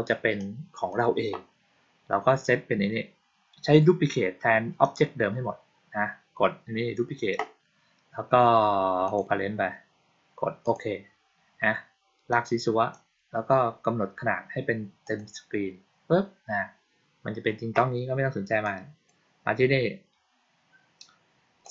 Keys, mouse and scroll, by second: 0.2-0.8 drag, 8.9 click, 10.5 click, 12.2 click, 14.9 click, 18.5-18.9 drag, 21.5 click.